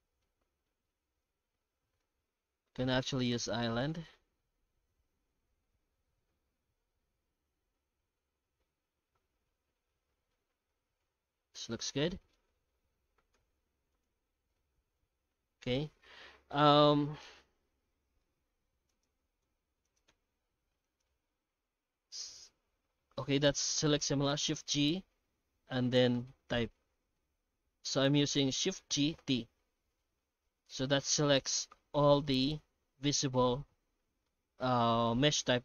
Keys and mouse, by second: 0.2-2.0 middle drag, 2.5 middle click, 2.8 F9, 10.3-12.3 middle drag, 12.9 alt+h, 13.3 z, 16.6-17.5 middle drag, 18.9 right click, 19.4 h, 19.8 right click, 20.1 h, 20.8 right click, 21.4 shift+g, 23.4 right click, 28.8 shift+g, 34.2-35.6 middle drag.